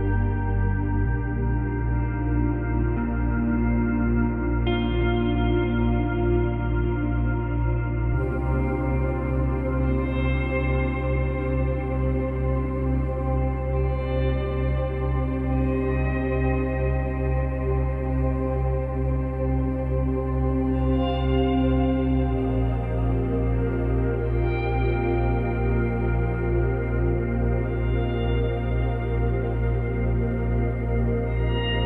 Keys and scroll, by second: 8.8 space, 29.4 space.